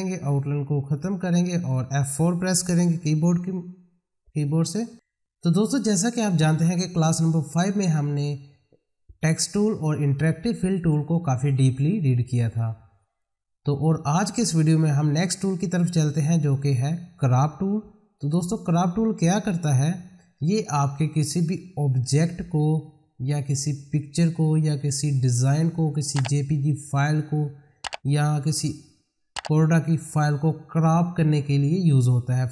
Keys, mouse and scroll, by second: 0.8 right click, 2.8 F4, 18.2 click.